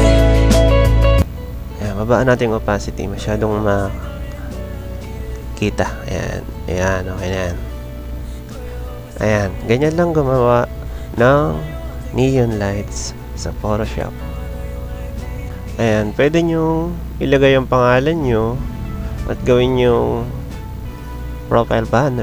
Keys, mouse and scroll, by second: 2.0 click, 6.5 click, 7.1-8.1 drag, 8.5 click, 9.5 click, 10.5 click, 12.1 click, 15.4 click, 16.6-18.4 drag, 18.8 click, 19.4-20.8 drag, 21.6 click.